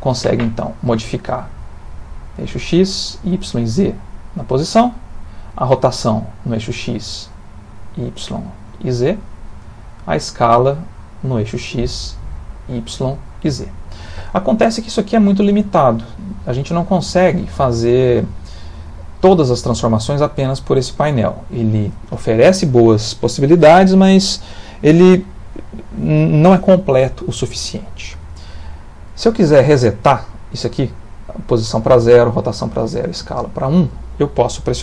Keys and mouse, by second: 1.2 click, 2.7 click, 3.6 click, 5.6 click, 7.3 click, 8.5 click, 9.9 click, 11.8 click, 13.0 click.